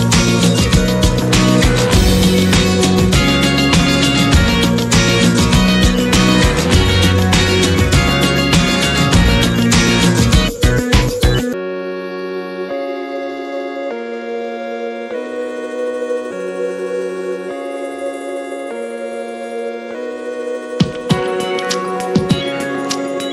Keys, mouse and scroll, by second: 0.9 middle click, 1.2 scroll down 3, 1.4 click, 1.6 F4.